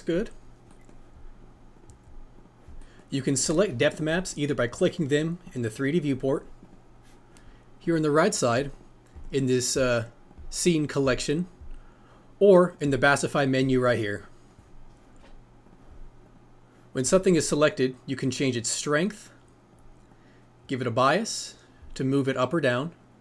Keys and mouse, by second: 4.2 click, 4.7 click, 5.4 click, 6.0 click, 6.6 click, 8.4 click, 9.1 click, 10.0 click, 10.7 click, 11.3 click, 16.3 click, 17.5-19.7 drag, 20.1-23.2 drag.